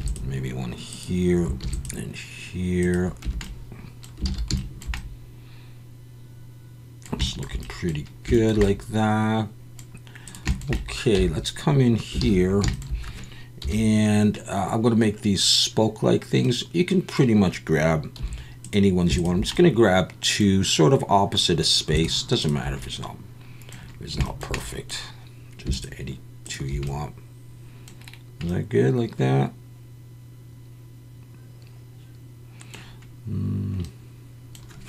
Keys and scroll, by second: 1.6 ctrl+r, 3.2 Tab, 4.3 alt+a, 11.2 Tab, 12.2 alt+a, 13.6 KP_1, 18.2 3.